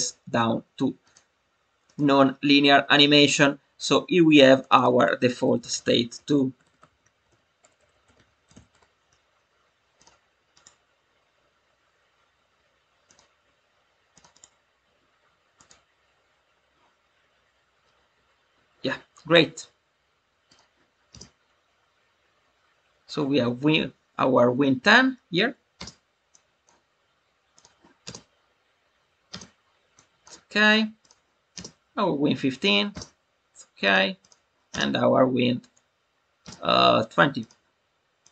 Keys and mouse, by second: 1.1-1.9 drag, 4.5-9.5 drag, 7.7 BackSpace, 9.9 click, 10.4-13.1 right drag, 14.1 click, 14.4-15.6 right drag, 20.4 click, 21.6 space, 25.7 space, 26.2-26.6 drag, 27.4 click, 29.9-30.2 drag, 30.9 click, 33.8 click, 34.2 click, 37.3 click, 38.2 drag.